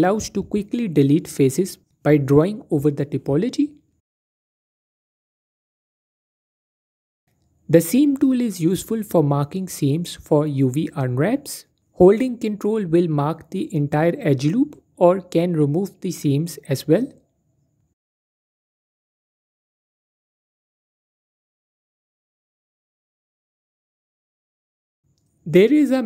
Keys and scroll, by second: 3.6-5.1 typing, 12.6 typing, 15.0 typing, 19.0 typing.